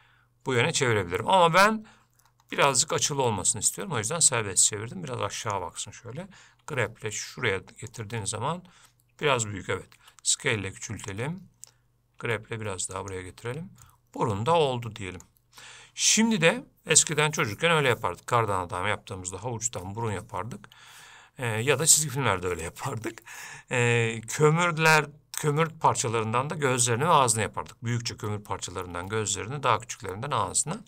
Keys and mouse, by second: 14.1-15.4 middle drag.